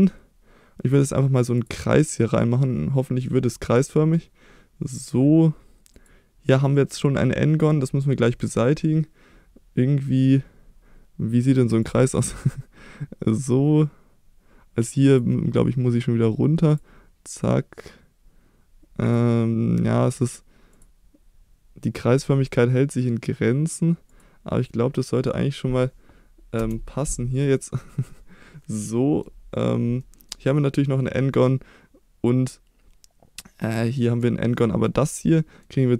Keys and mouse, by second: 28.8 middle click, 30.0 middle click, 31.4-32.5 middle drag, 33.7 middle click, 34.7 middle click, 35.0 middle click.